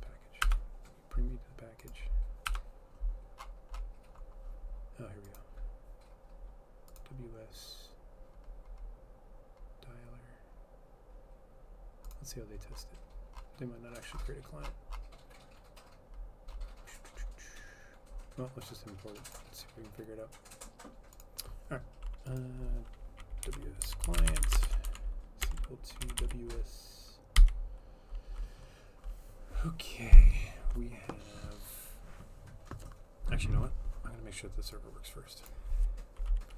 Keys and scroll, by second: 0.5 F12, 2.5 F12, 23.3-27.4 typing.